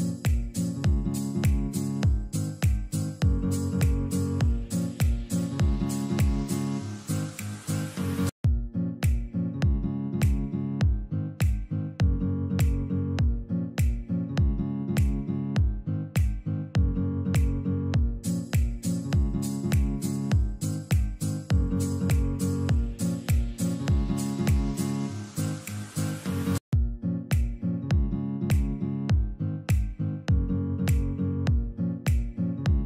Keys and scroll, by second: 3.4 Escape, 5.2 shift+Page_Up, 9.7 shift+F2, 10.0 F3, 16.0 ctrl+r, 18.6 F4, 21.1 shift+F2, 21.3 F3, 24.6 Escape, 28.6 F4, 31.0 shift+F2, 31.2 F3.